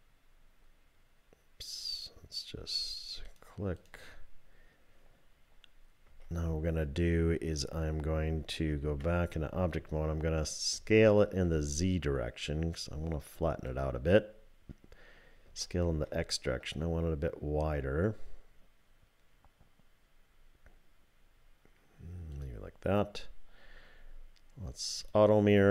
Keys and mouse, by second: 3.8 click, 6.1 3, 8.8 Tab, 10.7 s, 15.5 s, 25.0 click.